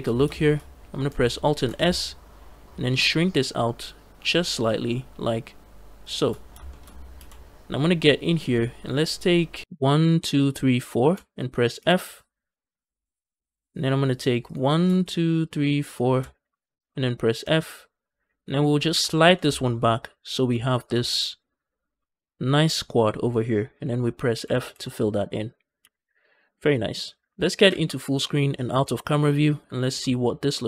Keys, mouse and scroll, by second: 0.0 scroll up 2, 0.2 shift+middle click, 1.4 alt+s, 5.9 shift+click, 6.3-7.0 scroll up 2, 6.5 shift+middle click, 7.0 f, 9.9 shift+click, 10.3 shift+click, 10.7 shift+click, 14.3 click, 15.3 shift+click, 15.8 shift+click, 16.4 shift+click, 17.3 f, 18.2 click, 18.6 g, 18.8 g, 20.2 shift+click, 20.6 click, 20.9 shift+click, 21.3 shift+click, 21.5 shift+click, 24.2 f, 24.6 z, 25.3 scroll down 2, 25.5 scroll up 2, 25.7 a, 25.8 a, 26.1 scroll down 2, 26.4-26.7 scroll up 2, 27.5 ctrl+space, 28.6 KP_0, 29.5 middle click, 29.9 shift+middle click, 30.1 scroll up 2, 30.4-30.6 middle drag.